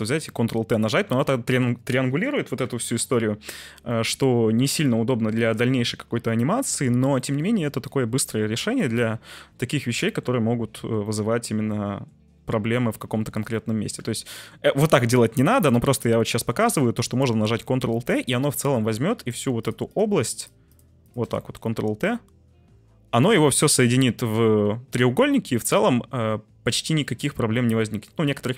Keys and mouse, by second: 0.2 ctrl+t, 0.9 Tab, 1.3 middle drag, 2.6 Tab, 4.0 middle click, 4.3 Tab, 4.8 middle click, 5.7 Tab, 6.4 Tab, 7.3 middle click, 7.5 Tab, 7.9 middle click, 8.3 Tab, 8.8-10.2 middle drag, 11.0-12.0 middle drag, 11.2 t, 12.4 Tab, 13.0 Tab, 13.6 middle drag, 14.0 Tab, 14.4 middle click, 15.7 Tab, 16.3 middle drag, 17.8 Tab, 18.5 middle click, 19.0 3, 19.5 shift+click, 19.9 shift+click, 20.4 shift+click, 21.0 shift+click, 21.4 middle click, 21.9 ctrl+t, 23.3 Tab, 23.7-27.0 middle drag, 24.6 c, 27.5-28.5 ctrl+z.